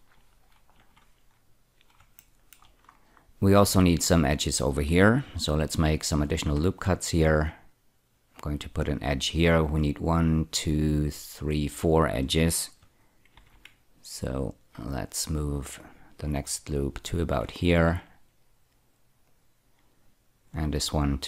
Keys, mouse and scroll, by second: 0.7-1.9 scroll down 2, 2.1 shift+middle click, 2.8 scroll up 3, 6.1 ctrl+r, 6.9 click, 8.9 click, 13.3 ctrl+r, 14.1 click, 16.9 click, 17.6 ctrl+r, 19.2 click.